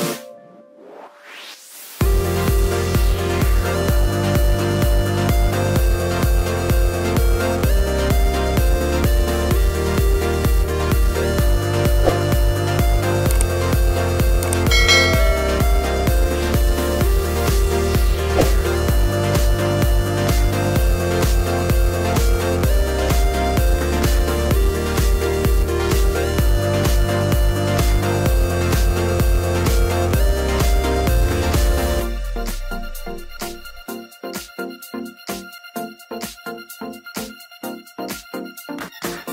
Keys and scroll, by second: 3.1 Return, 4.8-7.4 typing, 10.1 Delete, 11.9 Right, 14.1 Return, 24.8 t, 25.9 BackSpace, 27.0-29.7 typing, 31.1 Return, 34.8 BackSpace, 37.2-39.3 typing.